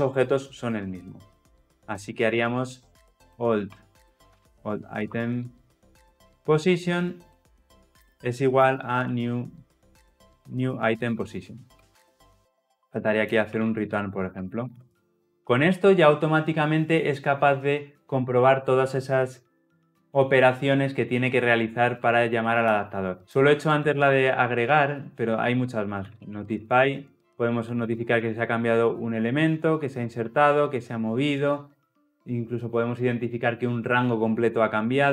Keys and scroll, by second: 6.6 Return, 11.8 Return, 14.9 ctrl+alt+o.